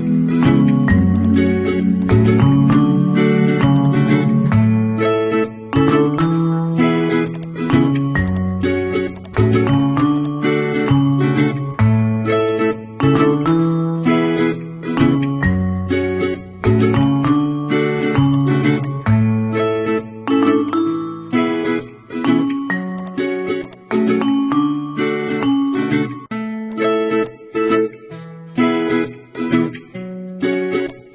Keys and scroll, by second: 2.8 ctrl+t, 6.2 Return.